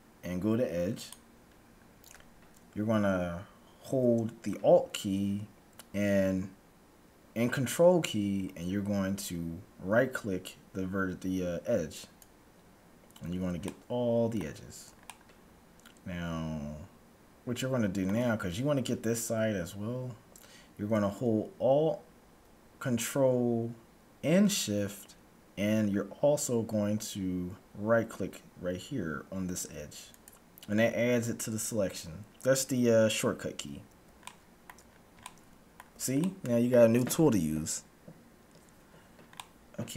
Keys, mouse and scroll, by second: 11.9-13.7 right drag, 13.7-16.9 middle drag, 30.1-31.9 right drag, 34.2-38.1 middle drag, 39.2-39.9 middle drag.